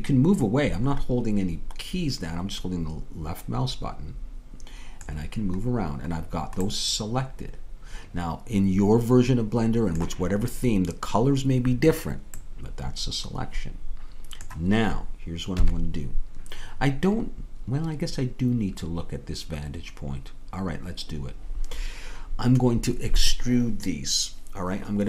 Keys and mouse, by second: 7.5-8.8 middle drag, 13.8 middle click, 15.6 KP_3.